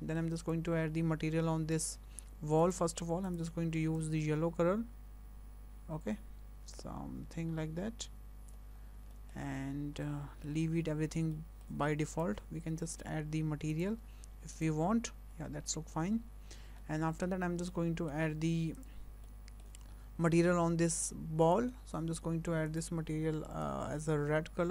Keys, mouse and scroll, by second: 0.4 click, 1.9 click, 3.0 click, 3.2 click, 8.9 scroll down 2, 9.3 shift+middle click, 9.7 scroll up 2, 10.1 shift+middle click, 11.4 shift+middle click, 12.1 click, 13.7 click, 14.6 click, 15.4 scroll down 2, 15.7 shift+middle click, 16.2-16.8 scroll up 4, 16.8 shift+middle click, 17.3-17.7 scroll up 2, 17.7 shift+middle click, 18.8 click, 19.3 shift+middle click, 21.5 click, 22.7 click.